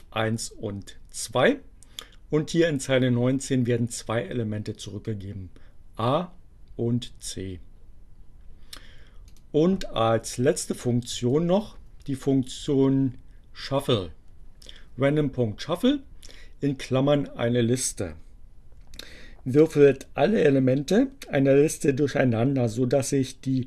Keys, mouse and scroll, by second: 9.3 click, 9.8 Delete, 10.7 Down, 11.8 Delete.